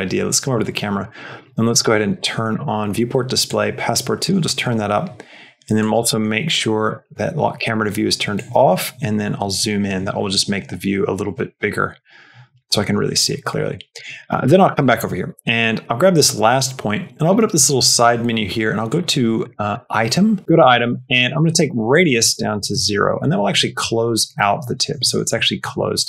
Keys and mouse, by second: 0.8 click, 1.5 click, 2.4 click, 3.3 click, 5.7 click, 6.7 click, 8.2 click, 11.3 t, 13.8 click, 14.1 shift+middle click, 14.7 middle click, 14.9 Tab, 15.3 shift+middle click, 17.2 click, 19.3 click, 19.6 click, 20.8 middle click, 21.9-23.1 drag, 24.9 shift+middle click, 25.3 middle click, 25.9 shift+middle click.